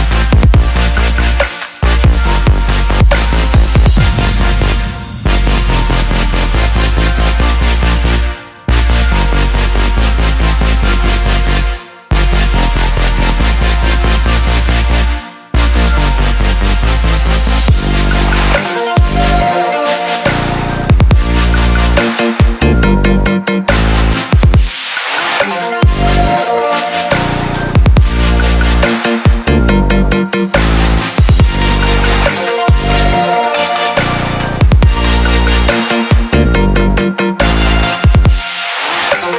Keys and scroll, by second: 18.9 ctrl+t.